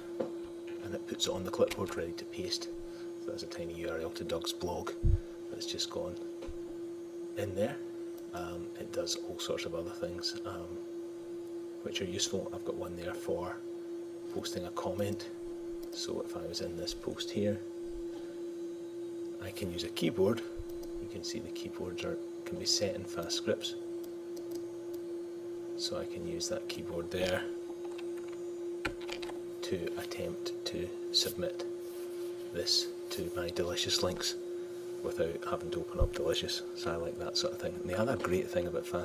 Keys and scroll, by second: 1.7 super+v, 38.1 super+Tab.